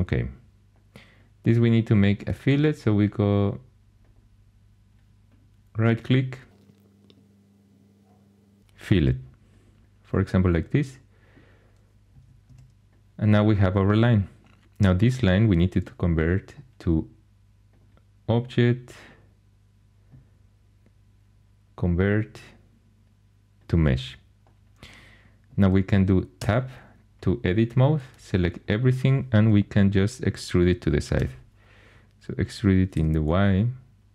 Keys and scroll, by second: 12.4 Tab, 13.7 Tab, 26.4 Tab, 31.1 e, 32.9 y.